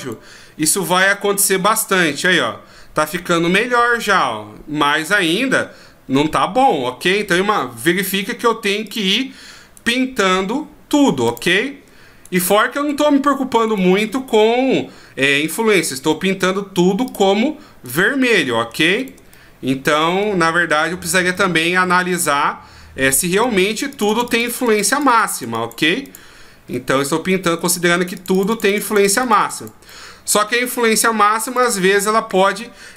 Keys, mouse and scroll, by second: 0.0 right click, 0.6 r, 6.9 r, 8.9 click, 9.7 right click, 11.2 click, 12.2 right click, 12.9 right click, 13.6 right click, 17.0 click, 17.8 right click, 18.3 middle click, 19.0 shift+right click, 19.3 middle click, 20.9 shift+right click, 21.3 middle click, 22.4 middle click, 23.4 click, 23.9 click, 24.1 click, 24.3 click, 24.4 click, 24.7 click, 24.9 click, 25.1 click, 25.3 click, 25.5 click, 26.0 click, 26.7 middle click, 27.9 click, 28.1 click, 28.3 click, 28.5 click, 28.7 click, 28.9 click, 29.0 click, 29.2 click, 29.4 click, 29.6 click, 29.9 middle click, 31.4 click, 31.6 click, 32.0 middle click.